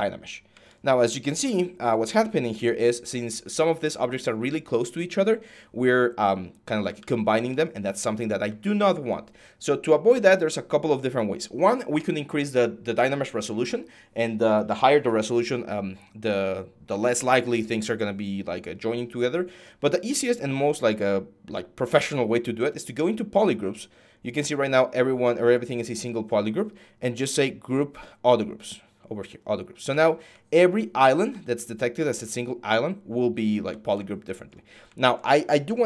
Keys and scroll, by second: 6.7 ctrl+z.